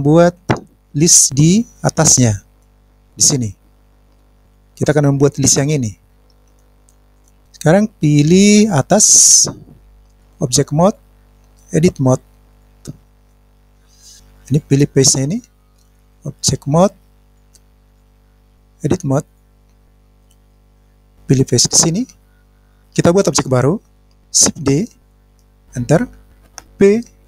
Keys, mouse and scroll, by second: 0.3 KP_1, 1.5-2.4 scroll up 2, 2.5 middle click, 9.7-10.1 scroll up 1, 10.1 click, 13.0 click, 13.6 scroll up 1, 13.8 middle click, 14.4 click, 15.0 click, 16.1 click, 17.7 click, 18.2 click, 18.5 click, 19.9 click, 21.3 click, 22.4-22.7 scroll down 1, 22.7 scroll up 1.